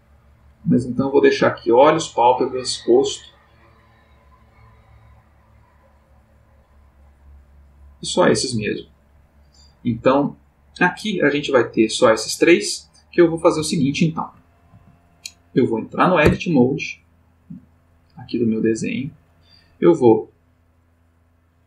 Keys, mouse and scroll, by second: 0.1 click, 0.8 click, 3.1 click, 3.9 click, 5.2 click, 5.7 click, 13.8 shift+middle click, 14.9-16.2 ctrl+scroll up 3, 16.2 scroll up 1, 16.3 Tab, 17.9 click, 20.2-20.9 drag, 21.5 click.